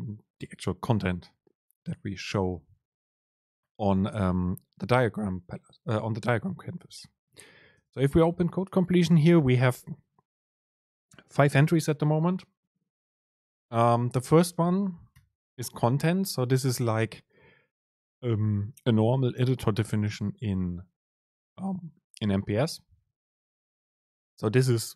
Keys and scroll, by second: 7.9 super+space.